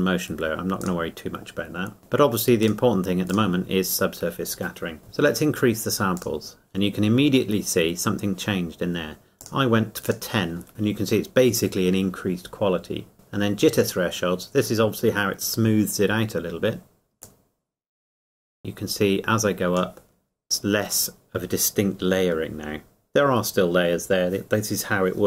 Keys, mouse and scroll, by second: 6.2 click, 9.4 click, 17.2 click.